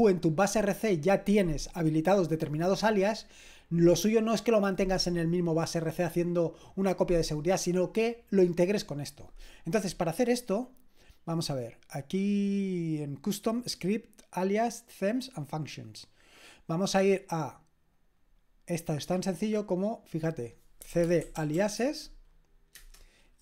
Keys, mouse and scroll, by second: 13.5 click, 18.0 click, 19.5 click, 20.3 click, 20.6-22.0 typing, 22.7 Return.